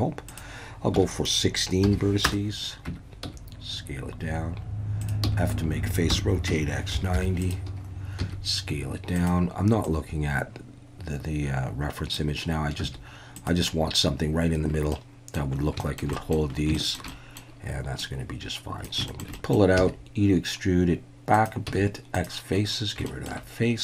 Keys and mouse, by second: 0.3-2.5 drag, 2.9 Tab, 3.2 s, 5.0 click, 5.2-7.1 typing, 7.4 click, 8.2 s, 9.1 click, 10.0-12.1 drag, 12.8 s, 13.3 click, 15.0-15.4 middle drag, 15.8 shift+middle drag, 16.2 middle click, 16.8 shift+middle click, 17.1-17.5 middle drag, 18.0 click, 19.1 shift+click, 19.4 click, 19.8 e, 21.3 click, 21.7 x, 23.1 shift+click.